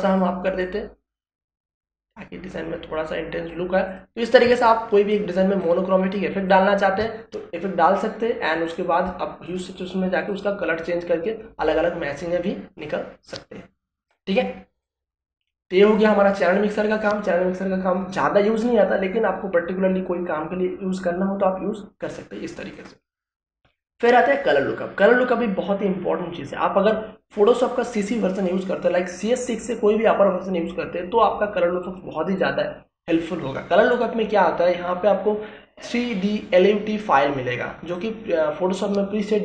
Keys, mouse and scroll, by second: 3.8 ctrl+space, 3.9 ctrl+click, 4.3 ctrl+space, 4.9-22.0 ctrl+drag, 24.2 click, 37.2 click.